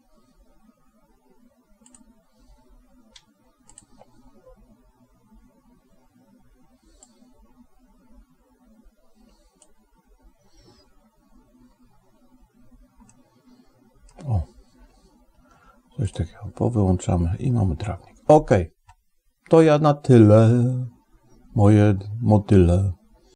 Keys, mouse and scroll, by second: 2.2 click, 4.5 click, 7.0-11.6 drag, 13.0-14.1 middle drag, 16.4 click.